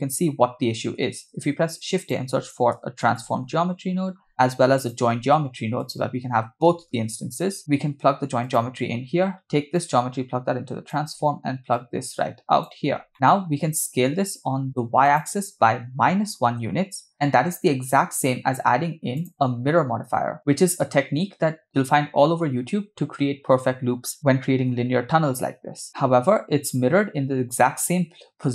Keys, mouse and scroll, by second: 1.2 shift+a, 5.2 shift+a, 9.8-10.9 drag, 11.7-12.7 drag, 13.1 middle click, 13.1 scroll up 2, 15.1-16.6 drag, 19.2-25.8 drag, 25.8 middle click.